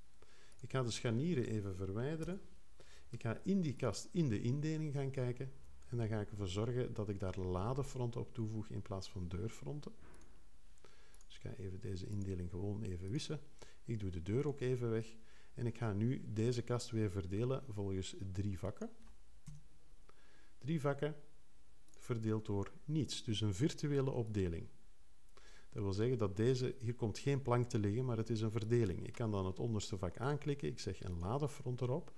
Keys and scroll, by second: 2.2 BackSpace, 19.4 3.